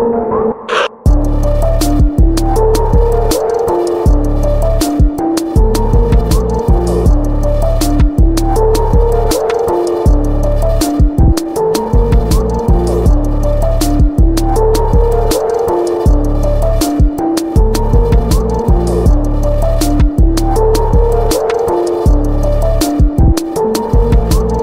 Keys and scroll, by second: 1.3 typing, 3.3 typing, 10.2 ctrl+c, 10.8 ctrl+v, 11.1 ctrl+t, 13.5 Return, 14.6 p, 16.3 ctrl+BackSpace, 19.8 ctrl+t, 21.8 Return.